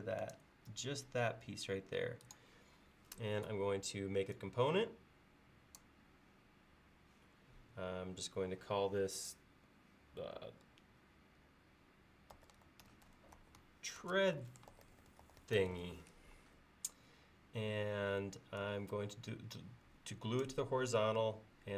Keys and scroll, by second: 12.2-16.1 typing.